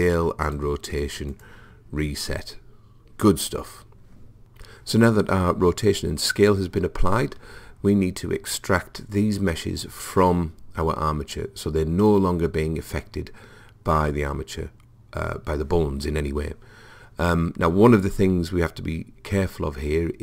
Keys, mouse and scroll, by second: 15.5-16.7 middle drag.